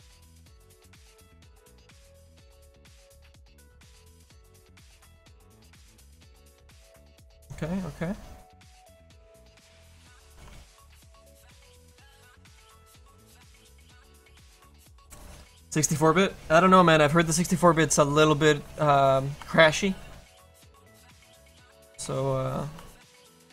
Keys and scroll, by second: 10.4 f.